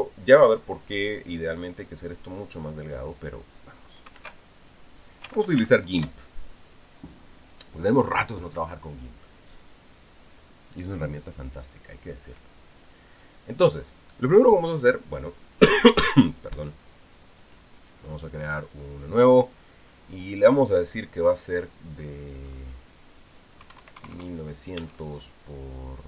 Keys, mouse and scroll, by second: 0.0 ctrl+s, 4.9 alt+F2, 5.8-6.9 typing, 18.3 click, 19.5 click, 24.4 KP_1, 24.8 KP_0, 25.6 Tab.